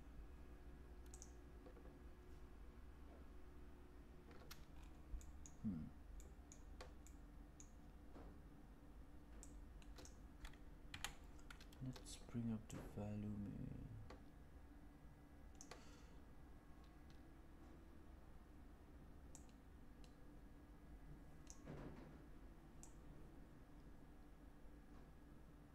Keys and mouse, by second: 5.1 middle click, 6.2 middle click, 7.0 middle click, 9.3-10.0 drag, 10.8 KP_1, 12.6-16.5 drag, 21.4 drag, 22.7-25.7 drag.